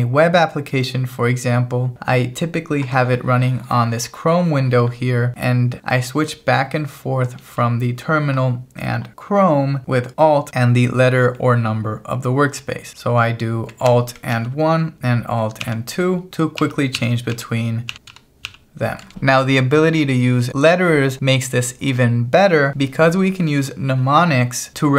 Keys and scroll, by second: 14.4 alt+1, 15.6 alt+2, 16.6 alt+1, 17.0 alt+2, 17.4 alt+1, 17.9 alt+2, 18.1 alt+1, 18.5 alt+2.